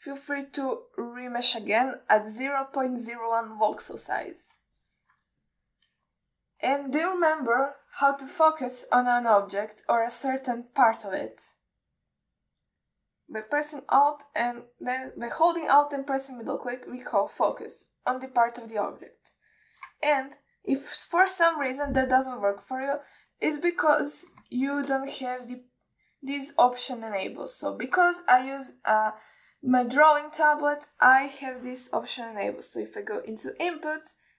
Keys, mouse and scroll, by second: 0.6 click, 1.0 click, 1.7-5.7 drag, 6.1 ctrl+alt+middle click, 6.7-7.8 middle drag, 12.3-14.8 scroll down 1, 17.4 alt+middle click, 18.0-18.6 scroll up 5, 19.2-21.2 middle drag, 21.4 scroll down 1, 23.4 scroll up 2, 26.7-28.0 drag.